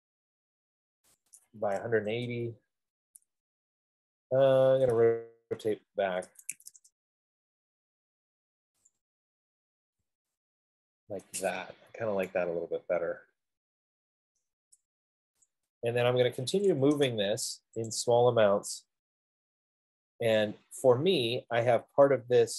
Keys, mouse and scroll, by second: 1.5 click, 2.0-3.1 typing, 6.3-7.1 typing, 6.8 click, 9.1 click, 9.9-10.7 typing, 11.9 Escape, 14.7 right click, 15.7 click, 16.7-17.1 typing, 18.2 click, 20.9-22.5 drag.